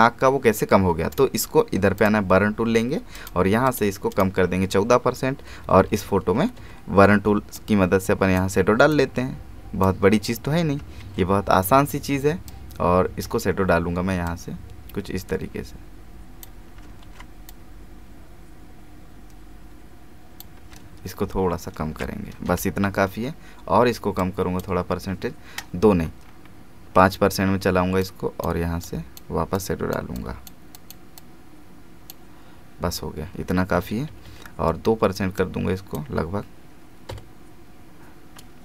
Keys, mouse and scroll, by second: 1.1 right click, 2.0 click, 5.4 [, 7.5-11.0 drag, 7.5 typing, 11.0 alt+z, 12.5-17.0 drag, 17.0 ctrl+alt+z, 17.5-21.1 drag, 21.1 ctrl+shift+f, 21.3-22.0 ctrl+shift+scroll down 1, 22.5 Return, 24.2-26.2 drag, 26.2-28.0 scroll up 1, 28.0-33.7 drag, 33.7-34.2 typing, 35.4-38.2 drag.